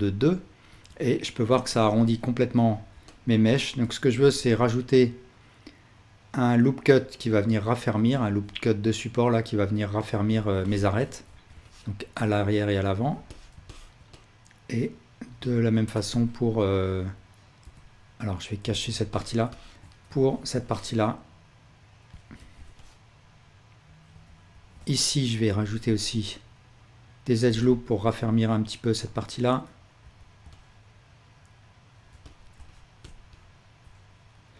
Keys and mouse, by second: 0.7 Tab, 4.1 ctrl+r, 7.8 click, 10.4-13.1 ctrl+alt+drag, 11.3 ctrl+r, 13.4-15.7 ctrl+alt+drag, 15.9 a, 17.6 l, 18.6 h, 20.3 ctrl+r, 20.6-22.0 drag, 22.5 ctrl+r, 24.5 alt+h, 24.8-27.4 drag, 25.6 ctrl+r, 27.7-32.1 alt+shift+drag, 30.0 ctrl+r, 32.3-34.5 alt+shift+drag.